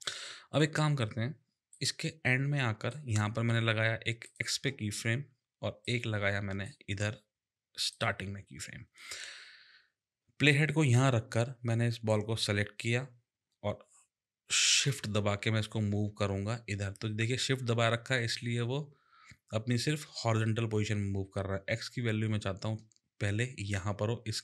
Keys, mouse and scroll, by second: 0.5 click, 1.7 click, 4.3 click, 5.8 click, 7.9 click, 12.1 click, 14.8 click.